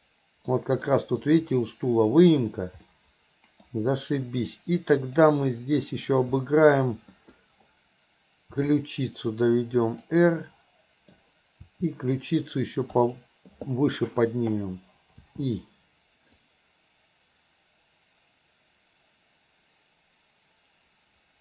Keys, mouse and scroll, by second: 0.9 middle drag, 2.9-3.7 middle drag, 5.0 click, 6.4-7.2 middle drag, 8.5 r, 10.4-11.2 middle drag, 11.7 r, 16.5-21.4 drag.